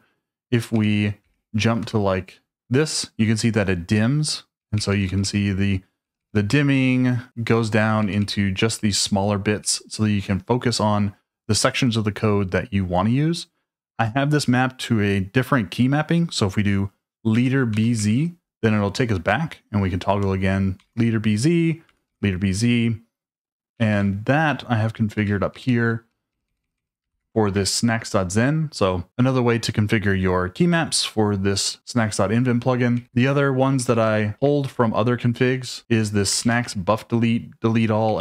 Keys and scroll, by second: 0.5-2.3 typing, 4.6-10.2 typing, 17.4 space, 17.7 b, 17.9 z, 20.2-23.3 typing, 23.9 ctrl+u, 24.4 ctrl+u, 25.0 ctrl+u, 25.2-27.6 typing, 32.7-33.7 typing, 34.4 Escape, 36.1-38.1 typing.